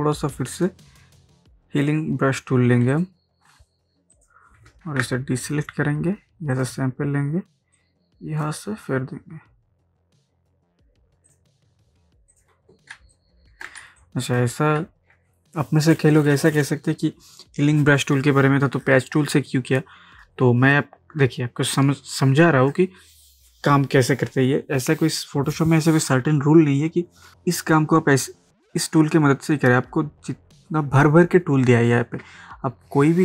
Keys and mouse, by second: 0.7-1.9 drag, 4.9 ctrl+d, 6.6-11.3 alt+drag, 13.0 ctrl+space, 13.2 ctrl+click, 13.5 ctrl+space, 14.0 click, 14.6 space.